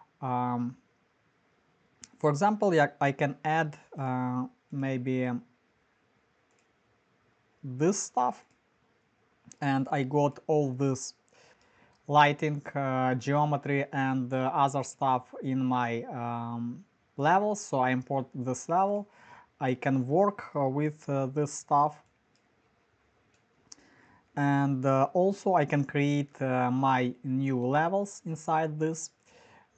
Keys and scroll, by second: 21.2 f, 23.2-27.1 typing.